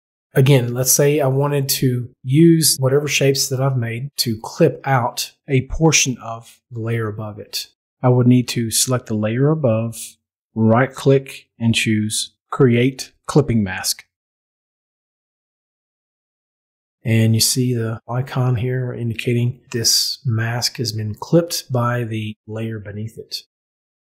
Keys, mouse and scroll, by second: 9.4 click, 12.2 right click, 14.7 click.